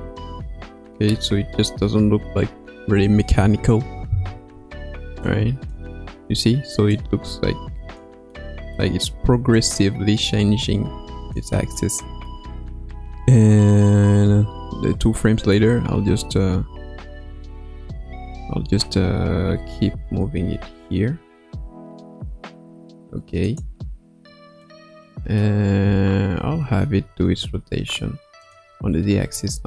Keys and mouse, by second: 3.9 i, 5.2-5.7 drag, 5.7 space, 6.2 space, 6.9-8.0 drag, 8.3-8.8 middle drag, 9.5-11.3 drag, 11.7-12.3 middle drag, 13.9 Right, 14.1 Right, 15.2 middle click, 16.8 KP_3, 17.2 KP_1, 19.5 r, 24.6 middle click, 26.4 r.